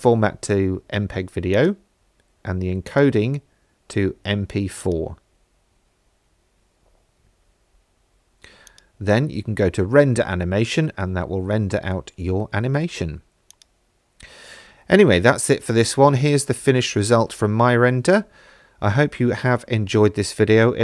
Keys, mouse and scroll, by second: 1.5 click, 2.9-5.0 drag, 6.2-7.8 scroll down 2, 8.7-13.5 drag.